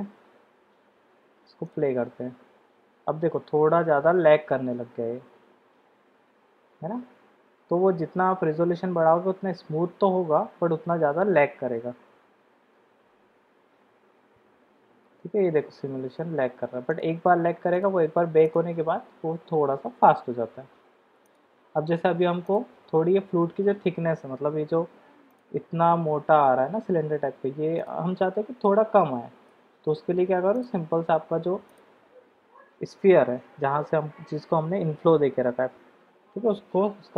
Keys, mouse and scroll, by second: 1.6 click, 17.7 drag, 21.4 click, 25.3 click, 28.2-28.6 middle drag, 29.5-29.9 middle drag, 30.7 click, 31.7 click.